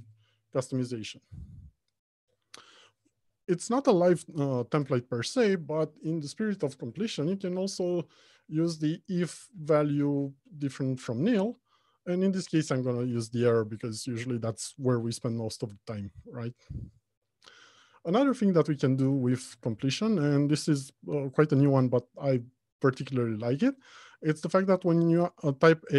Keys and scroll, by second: 9.8 Return.